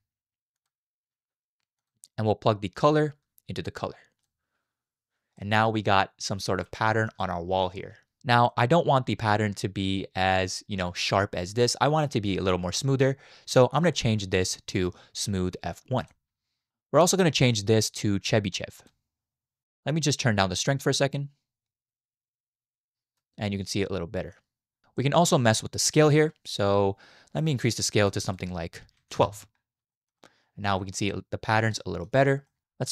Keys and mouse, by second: 2.7-4.3 drag, 5.4-6.4 middle drag, 6.9 shift+middle click, 7.2-8.2 middle drag, 8.5 middle click, 9.4 shift+middle click, 13.8-16.1 drag, 17.6-18.9 drag, 20.5-23.2 drag, 23.8 middle click, 25.0 middle click, 26.2-28.1 drag, 28.3 click, 29.9 shift+middle click, 30.2-30.7 middle drag, 30.8 shift+middle drag, 31.1 middle click, 31.8 shift+middle drag, 32.5 middle click.